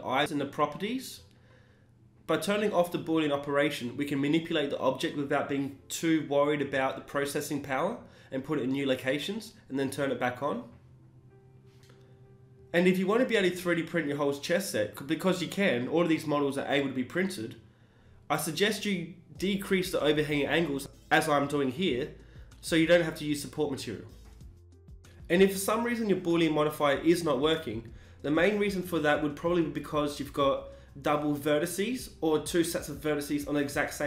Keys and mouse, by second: 7.6-11.4 drag, 11.4 Tab, 11.9 middle click, 12.9-14.5 right drag, 14.4 KP_1, 15.1 g, 18.9-20.3 middle drag, 20.3 KP_1, 20.7 g, 22.2 g, 24.8-25.9 middle drag, 25.9-27.1 right drag, 27.1 s, 31.1-32.9 middle drag, 33.7 ctrl+z.